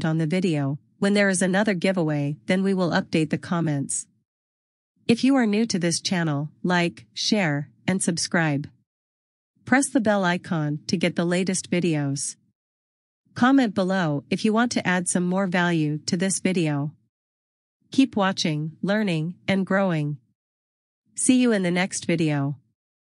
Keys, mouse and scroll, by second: 8.7 click.